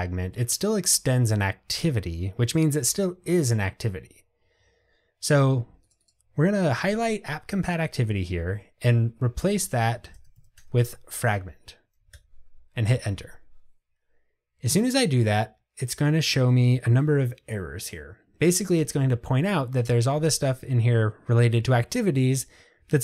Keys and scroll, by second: 12.2 Return.